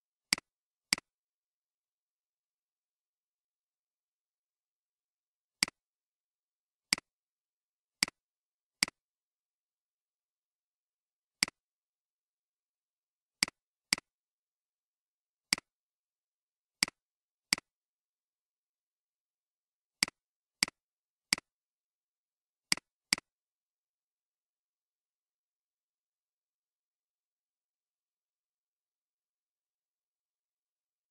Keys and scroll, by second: 1.8-4.0 typing.